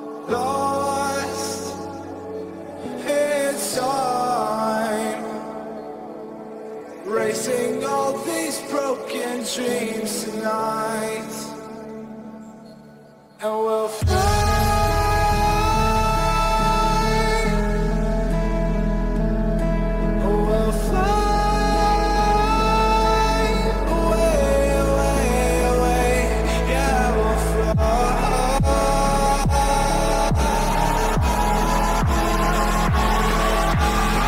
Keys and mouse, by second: 2.5 click, 6.1-7.4 drag, 8.8 click, 15.6-17.4 drag, 17.9-22.1 drag, 19.9 KP_0, 22.7-24.6 middle drag, 25.8-28.3 drag, 28.9-34.2 middle drag.